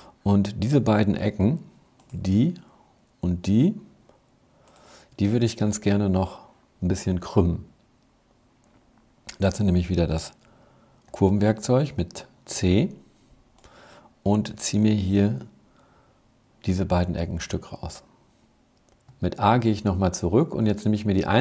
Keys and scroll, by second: 1.0 z, 10.8 c, 19.0 a.